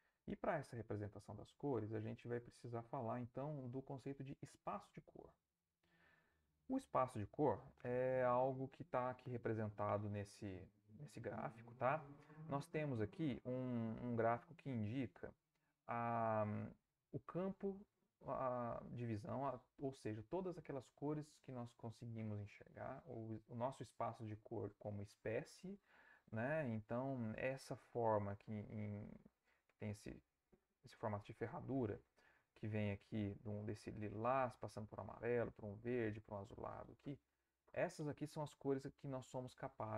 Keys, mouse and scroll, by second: 14.8-16.1 drag.